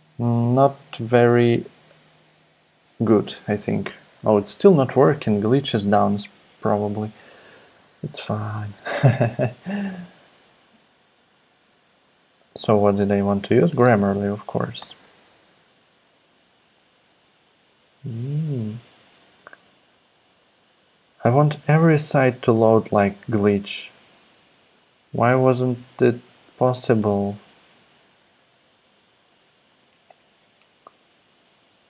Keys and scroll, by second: 5.1 super+i, 8.4-9.0 typing, 13.3-16.0 typing, 14.8 Return.